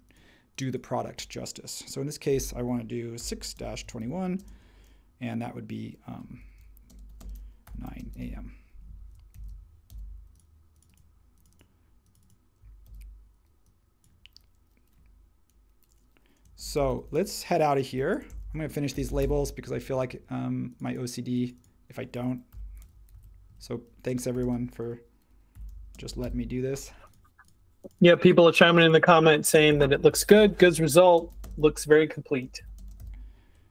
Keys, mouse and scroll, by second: 2.9-4.5 typing, 6.2-8.7 typing, 9.3 super+a, 9.9 super+c, 12.8 super+v, 16.3-19.5 typing, 22.2-26.7 typing, 29.3-33.5 typing.